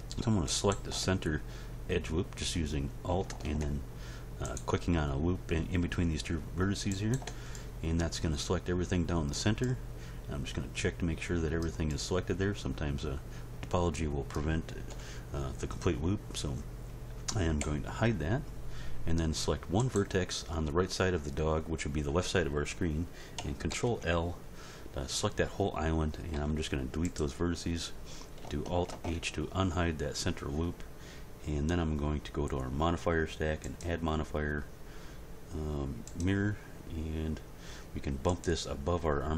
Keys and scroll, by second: 14.9 End, 17.6 h, 23.7 ctrl+l, 26.3 x, 28.9 alt+h.